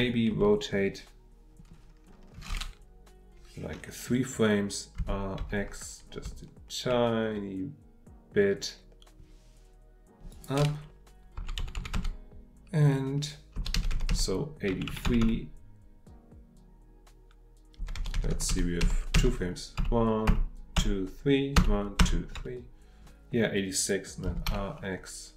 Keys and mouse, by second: 10.3 click.